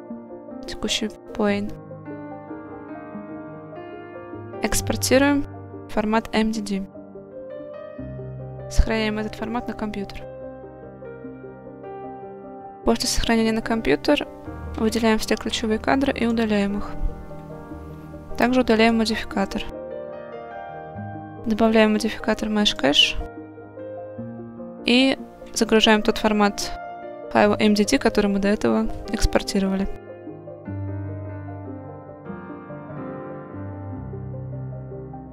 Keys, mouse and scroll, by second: 2.6-11.9 drag, 15.6 x, 18.9 click, 21.0-22.8 drag, 33.8 click.